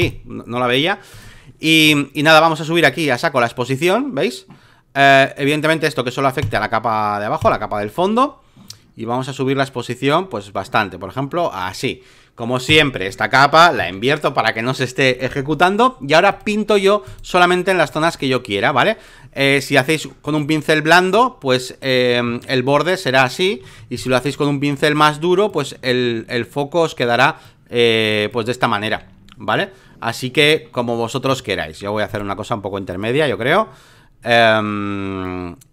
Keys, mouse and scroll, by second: 0.0-1.8 drag, 2.8-13.5 drag, 13.7 ctrl+i, 16.3 click, 17.0 right click, 17.8-20.1 drag, 20.2-22.2 drag, 22.2 x, 22.4-23.5 drag, 23.6 ctrl+z, 23.9 right click, 24.8-29.0 drag, 29.0 alt+middle click, 30.3 ctrl+z, 30.7 ctrl+z, 31.2 ctrl+z, 32.1 right click, 32.9-35.7 drag.